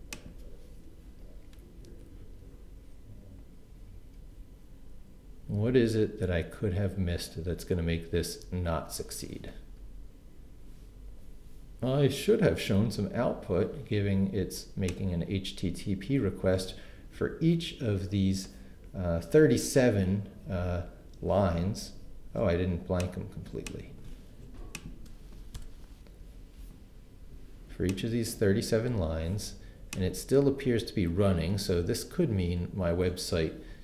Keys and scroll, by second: 25.6 shift+BackSpace, 26.1 BackSpace.